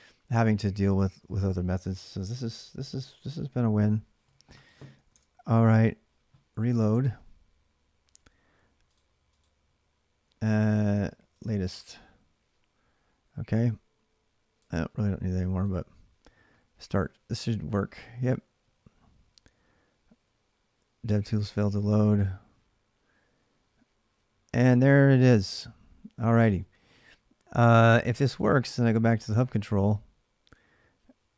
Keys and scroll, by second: 4.9 alt+Tab.